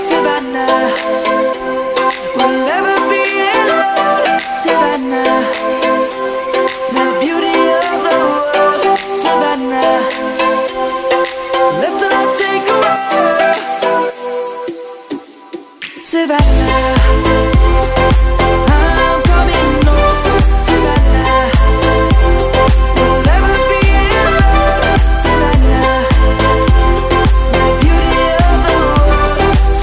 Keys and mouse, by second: 0.4 click, 8.7 Tab, 9.1 click, 10.2 middle click, 16.1 click, 16.3 Tab, 17.3 click, 24.1 1, 26.2 Tab.